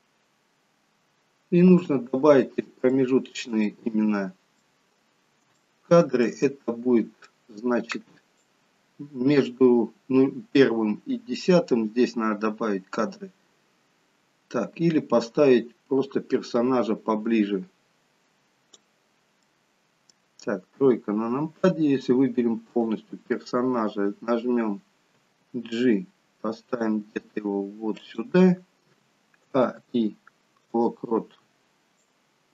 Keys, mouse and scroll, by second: 1.9 space, 2.9 shift+middle click, 3.7 middle click, 4.9-5.4 scroll up 4, 5.6 shift+middle click, 5.6-6.0 scroll up 1, 6.5 middle click, 8.7 click, 19.5 middle click, 20.9 KP_3, 22.8 click, 25.2 g, 29.5 a, 29.9 i, 32.1 click.